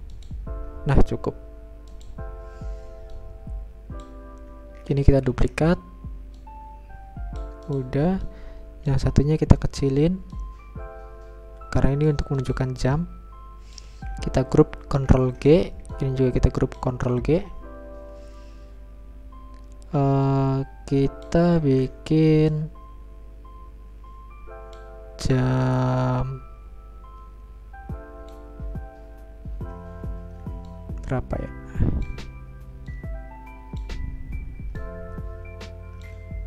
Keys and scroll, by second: 7.4 ctrl+d, 15.1 ctrl+g, 18.1 ctrl+g, 24.3 ctrl+z.